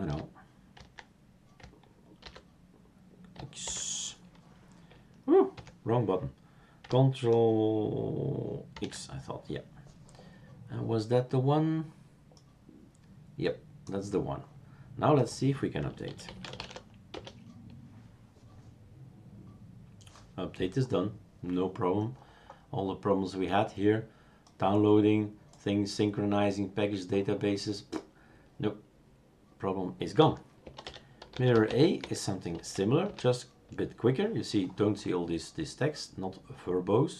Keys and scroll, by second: 2.3 ctrl+c, 3.7 super+x, 5.6 Escape, 8.7 ctrl+x, 15.8-17.1 typing, 17.1 Return, 18.1 typing, 30.7-31.9 typing, 33.0 Return, 33.0 typing.